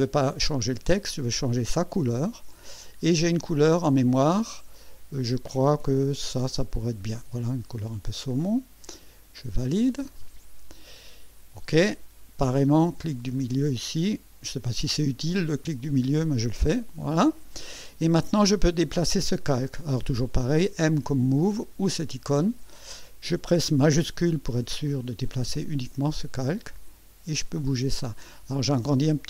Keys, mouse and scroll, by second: 2.0 click, 6.3 click, 10.1 click, 13.3 middle click, 16.6 Escape, 21.9 click, 24.9-27.8 shift+drag, 28.3 ctrl+scroll up 2.